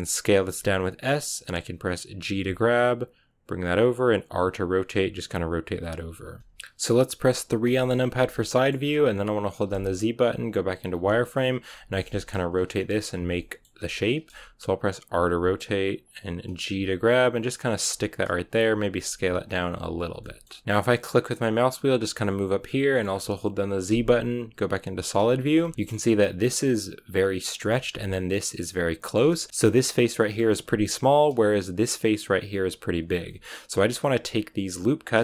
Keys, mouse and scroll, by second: 0.2 s, 2.0 g, 4.2 r, 5.9 g, 6.4-7.5 shift+middle drag, 7.5 KP_3, 8.2 shift+middle click, 8.6 scroll up 2, 11.6 middle click, 12.0 scroll down 1, 13.3-15.0 shift+middle drag, 15.0 r, 16.6 g, 18.3 s, 18.9 r, 19.5 g, 20.1 shift+middle click, 20.6 z, 21.0-25.1 middle drag, 25.2 scroll down 2, 25.4 shift+middle click, 27.6-29.1 shift+middle drag, 29.1-29.5 scroll up 1, 29.5-30.9 middle drag, 30.9 right click, 32.3 shift+right click, 33.0 scroll down 1, 33.2 middle click, 34.1-35.1 right drag, 35.1 shift+middle click.